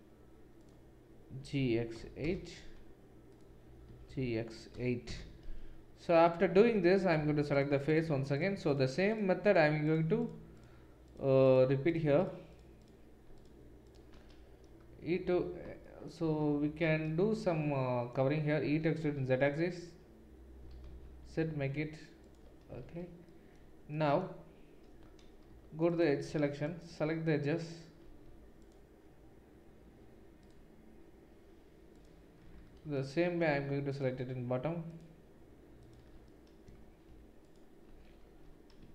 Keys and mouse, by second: 0.6 click, 0.6 middle click, 1.4 g, 3.9 g, 6.6 3, 9.1 shift+click, 9.1 shift+middle click, 11.0-12.3 shift+drag, 11.0-12.3 shift+middle drag, 12.8-14.1 shift+drag, 12.8-14.1 shift+middle drag, 16.4 shift+z, 18.8 e, 22.8 shift+z, 24.9 3, 25.5 2, 26.6 alt+shift+click, 26.6 alt+shift+middle click, 30.4-32.4 alt+shift+drag, 30.4-32.4 alt+shift+middle drag, 33.9 alt+shift+click, 33.9 alt+shift+middle click, 37.5 alt+shift+click, 37.5 alt+shift+middle click.